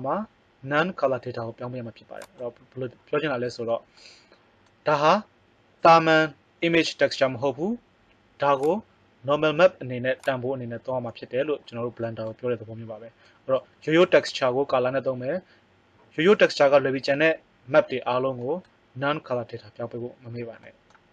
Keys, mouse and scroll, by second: 8.6 click, 10.3 right click.